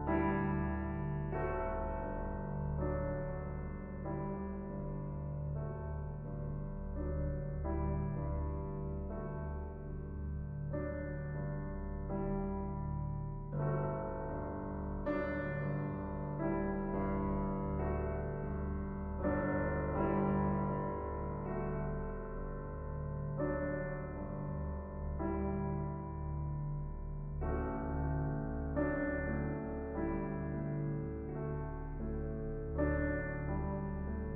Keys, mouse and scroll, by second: 0.0 click, 0.5 KP_0, 0.7 middle click, 1.3 scroll up 1, 1.4 shift+middle click, 1.8 ctrl+Tab, 3.1 middle click, 3.8 shift+click, 4.6 middle click, 5.1-6.7 drag, 6.7 middle click, 7.1-9.8 drag, 9.8 scroll down 2, 9.9 middle click, 10.8 shift+click, 11.2 middle click, 11.9 KP_0, 13.1 click, 14.6-19.4 drag, 20.2 click, 20.9 KP_0, 21.3-21.6 scroll up 2, 22.1 click, 22.5 middle click, 23.4 ctrl+Tab, 24.1 scroll up 3, 26.0 ctrl+a, 26.7 Tab, 27.7 u.